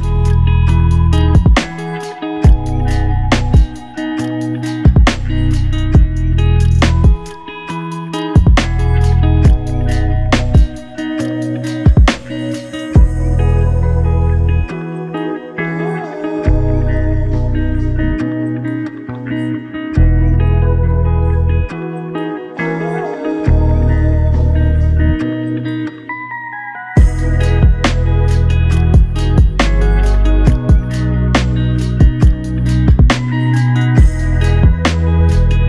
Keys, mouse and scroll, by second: 1.0 n, 6.0 n, 10.5 q, 13.3 scroll down 1, 15.4 f, 23.4 alt+click, 29.9-30.7 typing, 31.9-32.9 typing, 33.4 alt+click, 34.4 typing.